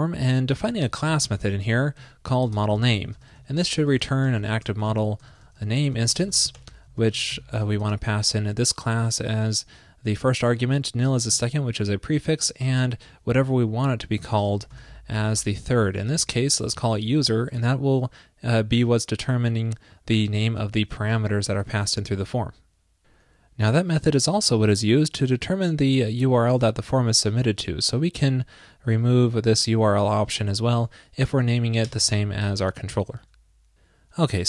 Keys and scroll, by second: 16.2 alt+shift+Left, 21.0 super+s, 32.7 super+s.